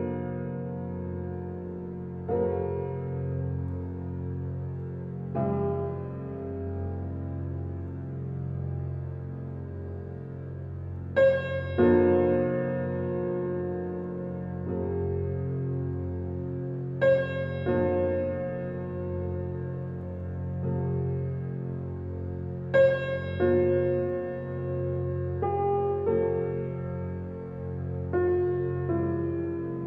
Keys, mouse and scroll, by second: 1.8 Escape, 2.3 F7, 3.5 click, 4.7 right click, 5.1 alt+middle click, 5.6 alt+click, 7.3 alt+right click, 7.9 alt+middle click, 8.6 right click, 9.8 click, 10.9 alt+right click, 11.7 4, 13.6 r, 14.9 alt+right click, 15.4 alt+click, 16.1 alt+middle click, 16.5 alt+right click, 18.5 -, 19.9 typing, 19.9 shift+click, 21.0 right click, 21.7 click, 22.0 alt+click, 23.0 6, 24.7 ctrl+s, 25.6 alt+click, 26.0 alt+right click, 26.3 alt+click, 26.7 alt+middle click, 27.1 alt+right click, 28.3 F7, 29.2 alt+click, 29.7 alt+right click.